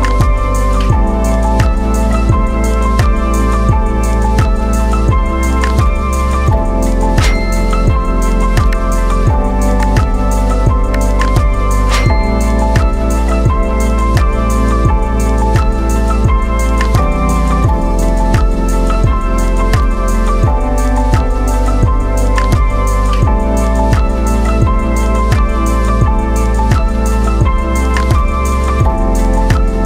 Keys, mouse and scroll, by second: 6.6-7.3 scroll down 1, 8.1 v, 9.2-12.4 drag, 12.4 scroll up 1, 13.8-16.1 drag, 16.4 right click, 17.1-20.7 drag, 20.0 BackSpace, 23.0-24.3 middle drag, 24.3-29.8 drag.